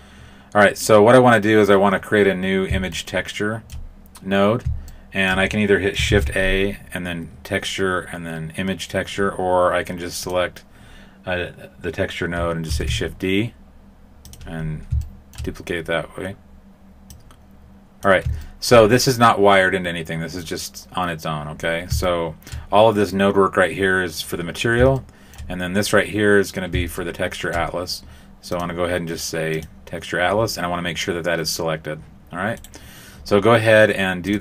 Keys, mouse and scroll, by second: 2.9 shift+middle click, 4.8 shift+middle click, 6.0 shift+a, 10.1 click, 12.6 shift+d, 14.5-15.3 scroll up 4, 15.0 shift+middle click, 17.0 click, 18.3 shift+middle click, 21.5 scroll down 2, 22.0 shift+middle click, 24.9 shift+middle click, 25.8-26.7 scroll up 2, 26.9 shift+middle click, 28.5 click, 32.5 right click, 34.2 click.